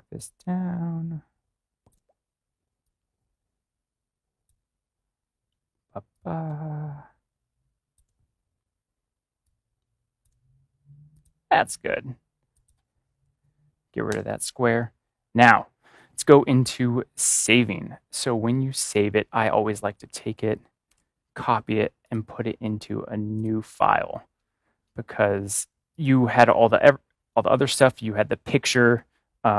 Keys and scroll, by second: 20.8 ctrl+c.